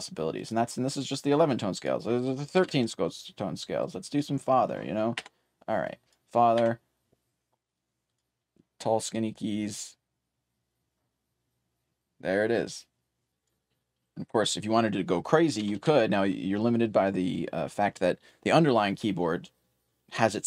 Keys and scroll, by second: 7.3-9.5 typing, 13.0-17.2 typing.